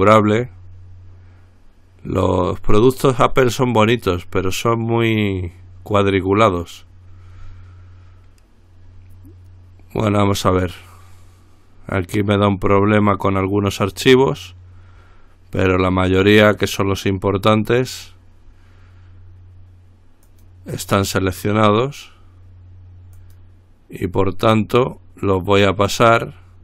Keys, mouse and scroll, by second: 14.1 click, 20.5 click, 23.4 click.